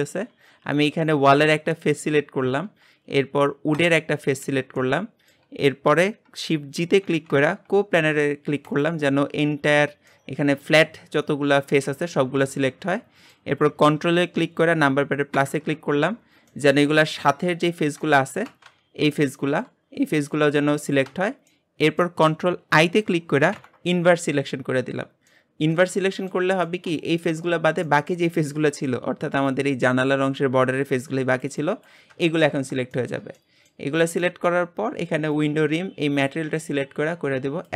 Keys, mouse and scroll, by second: 0.1 click, 4.8-8.9 shift+middle drag, 8.9 shift+g, 10.1-15.3 middle drag, 15.3 ctrl+KP_Add, 16.6 middle click, 17.3-18.0 scroll up 1, 18.0-23.5 shift+middle drag, 23.5 ctrl+i, 24.7-25.3 scroll down 2, 25.3-27.5 middle drag, 27.5-27.8 scroll up 2, 27.8 shift+middle click, 28.3 scroll up 2, 32.5 middle click, 32.5 scroll down 3, 32.9-34.0 shift+middle drag, 34.0 scroll up 1, 34.2-35.3 shift+middle drag, 35.3 click.